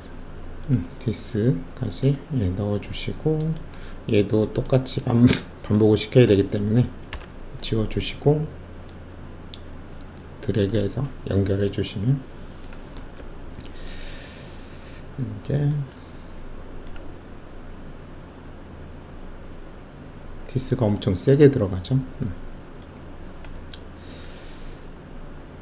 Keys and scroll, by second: 7.1 Delete, 13.1 shift+F1.